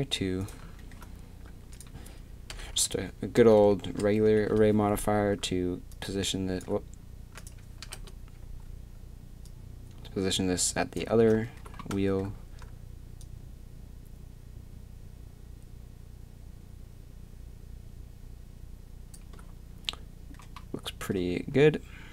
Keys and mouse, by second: 1.7-5.9 drag, 11.2 z, 13.2-14.4 drag, 20.1-21.1 middle drag.